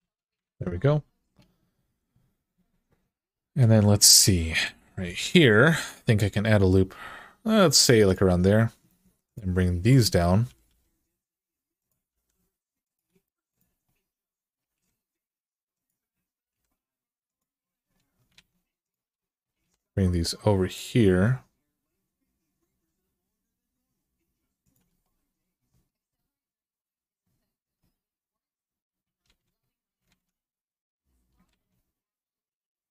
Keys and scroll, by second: 0.2 alt+z, 4.8 ctrl+r, 10.2 typing, 11.9 g, 14.4 g, 16.2 g, 18.1 alt+z, 19.3 g, 24.7 g, 29.0 alt+z, 29.9 alt+z, 31.3 alt+z.